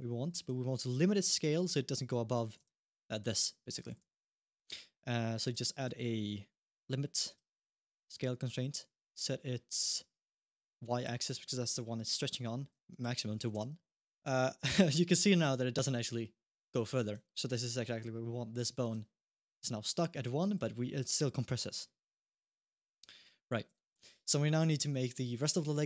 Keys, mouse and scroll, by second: 0.7 g, 2.5 alt+g, 3.7 alt+g, 3.8 alt+r, 4.3 click, 5.2 click, 5.6 click, 10.7 click, 12.7 click, 14.1 click, 14.1 shift+middle click, 14.1 g, 17.6 g, 20.3 g, 23.8 alt+g.